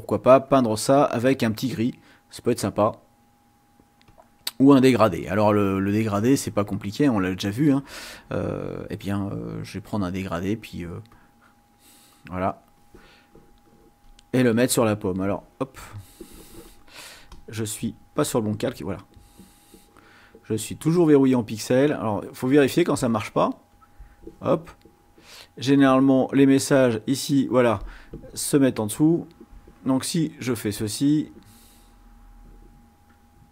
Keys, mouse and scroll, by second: 0.4 click, 1.6 click, 3.9 click, 11.1-12.9 drag, 15.1-16.3 drag, 17.3 click, 19.0 click, 21.6 click, 22.3 click, 23.6 click, 25.5 click, 29.2 click.